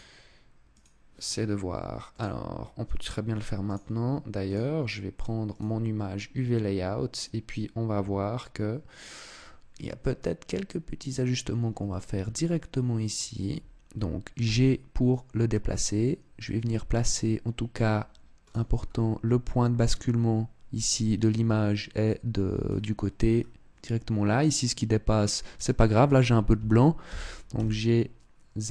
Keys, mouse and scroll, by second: 1.8 click.